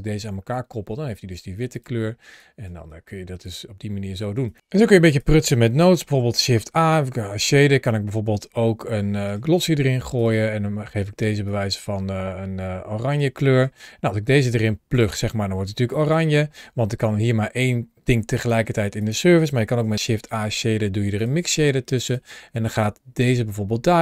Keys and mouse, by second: 1.5 click, 4.3 click, 6.1 shift+a, 13.3 click, 14.0-14.9 drag, 15.8 click, 17.2 click, 18.8 click, 19.5 shift+a, 22.7 click, 22.8-23.4 drag.